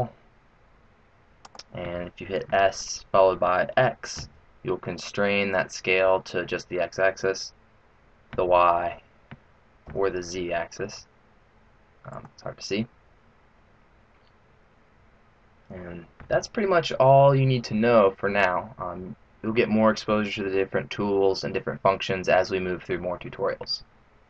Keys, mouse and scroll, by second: 2.4 s.